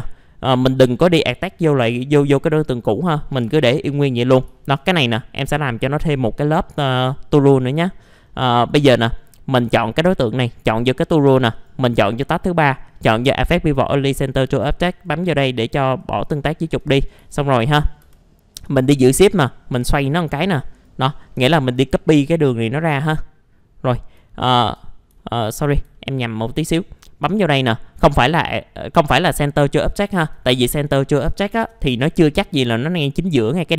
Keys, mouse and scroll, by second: 0.5 middle click, 2.1 right click, 2.7 middle click, 4.6 alt+middle click, 5.3 scroll up 1, 5.7-6.2 scroll down 1, 6.2 middle click, 11.5-16.3 drag, 16.4 alt+middle click, 17.0 scroll up 1, 17.2-18.0 typing, 19.0-20.9 shift+drag, 22.2 middle click, 22.6-24.1 alt+middle drag, 24.6 ctrl+z, 25.9 alt+middle click, 27.3 click, 29.9 alt+middle click, 31.0 middle click, 31.6 typing, 32.4-33.7 scroll up 1.